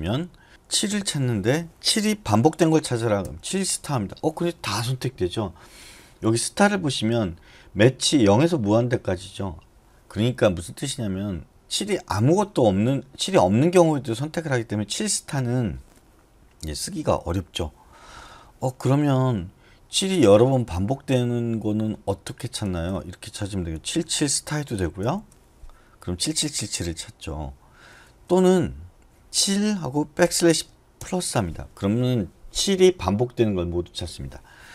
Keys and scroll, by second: 0.0-0.9 typing, 3.2 *, 22.6 BackSpace, 22.8 BackSpace, 23.7 7, 23.9 7, 25.0 *, 28.0 BackSpace, 28.3 BackSpace, 30.2 \.